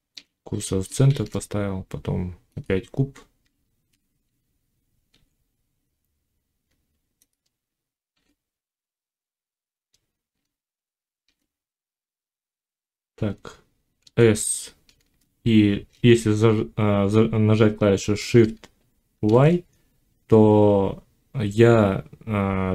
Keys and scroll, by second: 0.9 shift+a, 3.3 Tab, 4.9 s, 7.9 s, 10.9 shift+x, 13.9 s, 19.0 shift+y.